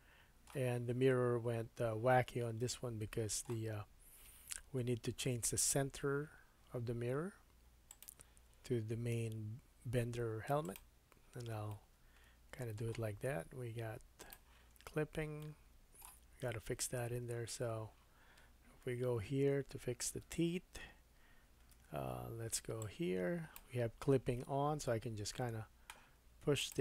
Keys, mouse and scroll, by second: 0.0 middle click, 2.7 middle click, 8.0-14.2 middle drag, 14.2 click, 14.3-22.8 middle drag, 18.9 KP_1, 20.2 Tab, 21.7 1, 22.8-26.8 drag.